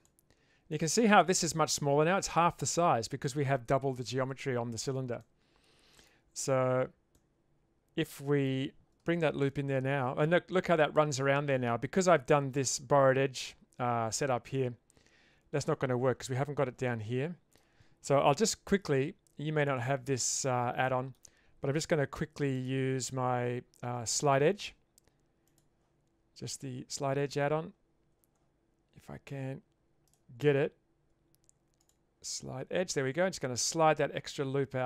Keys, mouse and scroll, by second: 0.7 middle click, 5.3 middle click, 7.1-8.5 middle drag, 9.4 ctrl+r, 14.5-15.6 middle drag, 16.9-17.6 middle drag, 18.4 2, 19.6 alt+click, 20.1-20.4 shift+middle drag, 20.9 shift+middle drag, 22.7-25.6 right drag, 30.2-31.9 right drag.